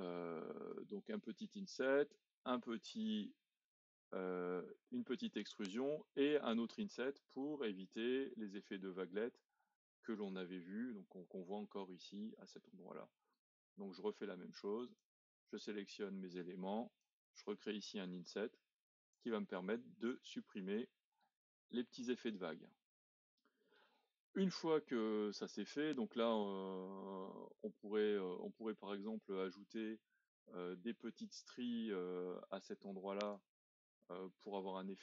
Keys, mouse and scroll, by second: 5.4-6.7 drag, 8.3 scroll up 2, 9.3 scroll down 2, 9.9-11.0 middle drag, 11.0-14.1 scroll up 2, 15.0 click, 17.0 click, 19.6-21.5 middle drag, 21.5-22.1 scroll down 2, 22.1-25.1 middle drag, 25.1-26.0 scroll up 2, 26.0-26.5 scroll down 2, 26.5 middle click, 27.0-27.8 scroll up 2, 27.8-31.2 middle drag, 31.4-35.0 drag.